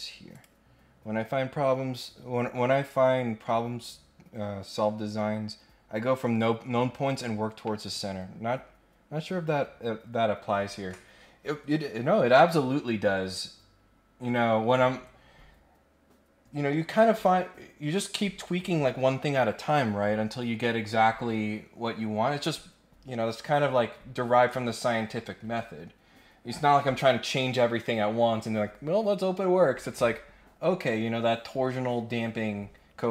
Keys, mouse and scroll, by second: 0.3 click.